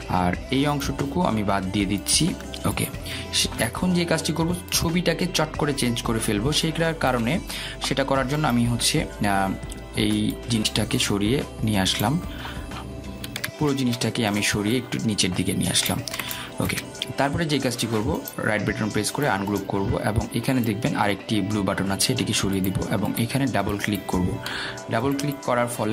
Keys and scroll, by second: 3.3 Delete, 15.7 ctrl+z.